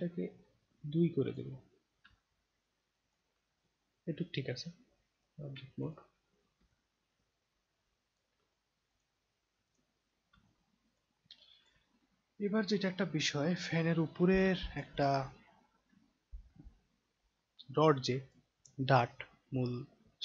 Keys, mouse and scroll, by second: 2.1-3.1 alt+drag, 3.6-5.1 right drag, 5.8 click, 6.7-8.2 alt+drag, 8.9 click, 9.7 click, 10.1 scroll down 2, 10.5 alt+click, 11.3 alt+click, 12.3 scroll down 1, 14.5 alt+click, 14.9 click, 15.5-16.5 scroll down 2, 16.7 alt+scroll down 1, 17.5-18.3 alt+drag.